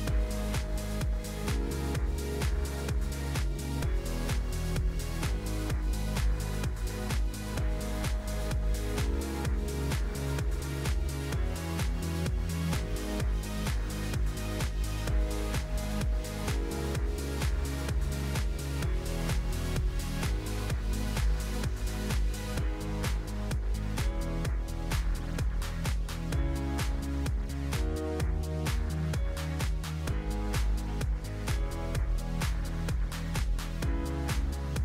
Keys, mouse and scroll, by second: 3.9-6.9 drag, 7.1-8.9 scroll down 6, 8.9-10.5 drag, 10.5-11.2 scroll down 6, 11.2 click, 11.9-12.5 scroll up 2, 12.5 click, 12.8 g, 16.3 click, 17.0 click, 17.6-17.9 scroll up 4, 17.9 click, 18.1-18.6 scroll down 4, 18.6 click, 19.5 click, 20.0 h, 20.3 click, 20.7 shift+a, 22.0 x, 22.6 shift+a, 23.4 shift+a, 24.3-26.3 scroll up 6, 26.3 click, 27.6-29.7 drag, 29.7 KP_0, 31.1-34.8 drag.